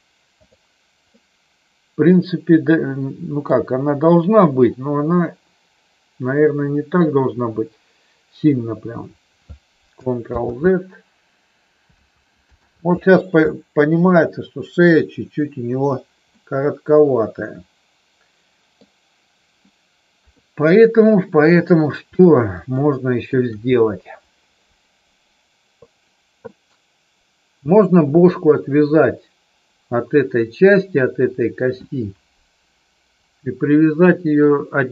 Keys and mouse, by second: 1.1-3.4 middle drag, 10.2 ctrl+z, 12.6 ctrl+z, 16.2-18.9 middle drag, 20.1 KP_3, 21.5 click, 22.7 middle click.